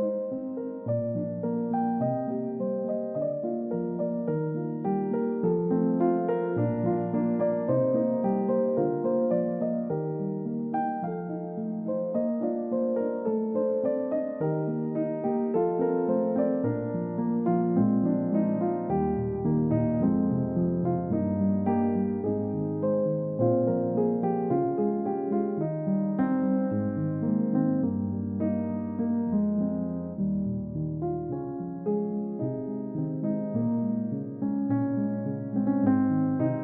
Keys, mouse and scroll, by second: 0.0 scroll up 1, 0.2-1.1 scroll down 1, 2.6 middle click, 4.2-4.9 scroll down 1, 4.9-7.3 scroll up 1, 7.3 right click, 11.3 scroll down 1, 11.5 middle click, 12.0-12.4 scroll up 1, 13.5 scroll down 1, 13.8 middle click, 17.8 right click, 20.0-20.5 scroll down 1, 20.5 right click.